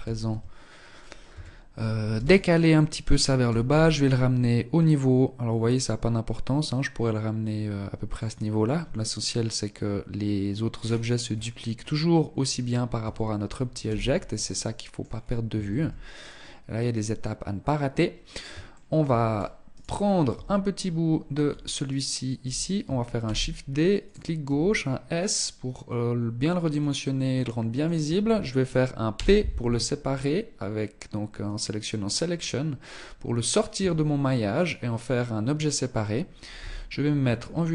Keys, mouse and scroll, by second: 0.6 a, 1.4 b, 2.8 g, 10.0-10.6 scroll down 9, 10.6 scroll up 1, 11.1-12.4 scroll up 3, 12.4 Tab, 13.2 z, 13.8 middle click, 14.6 scroll down 1, 15.2 ctrl+s, 18.0 shift+middle click, 18.6-18.9 scroll up 3, 19.2 right click, 19.7 Tab, 20.0-20.8 scroll up 1, 20.8 scroll up 1, 21.2 alt+right click, 22.5 shift+d, 23.8 s, 26.6 middle click, 28.4 p, 33.0 Tab, 33.9 right click, 35.8 KP_1, 36.6-36.9 scroll down 5, 36.9 Tab.